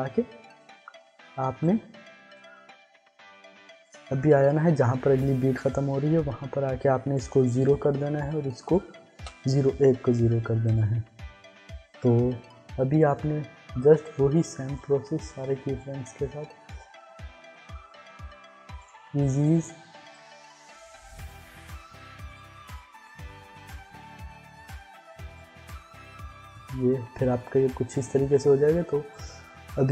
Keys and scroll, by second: 7.6 0, 9.1 0, 13.8 ctrl+z.